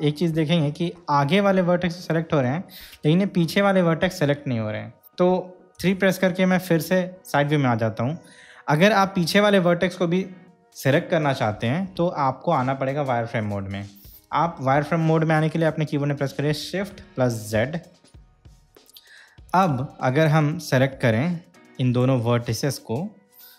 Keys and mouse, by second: 0.6-2.8 middle drag, 6.0 KP_3, 17.8 shift+z, 20.4-22.3 drag.